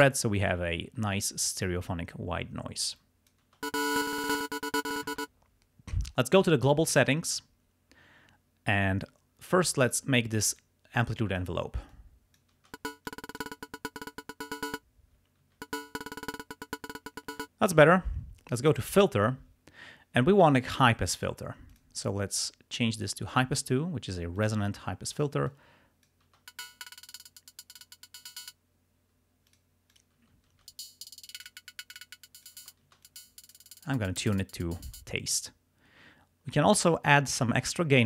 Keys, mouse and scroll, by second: 1.5 click, 3.0 click, 3.5 space, 4.0 click, 5.1 space, 6.7 click, 9.8 click, 10.6 click, 11.9 click, 12.6 space, 13.2 click, 15.2 space, 17.3 space, 18.7 click, 21.8 click, 23.0 click, 24.4 click, 25.5 click, 26.4 space, 26.7 click, 27.6 click, 29.6 click, 30.0 click, 30.2 space, 30.7 space, 31.1 click, 32.0 click, 32.6 space, 33.1 click, 34.8 space, 37.2 click.